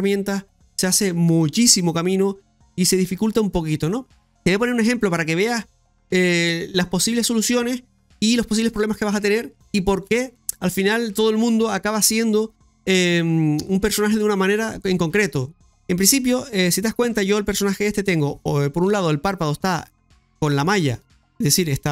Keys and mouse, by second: 16.3 middle click, 20.9 right click, 21.5 right click.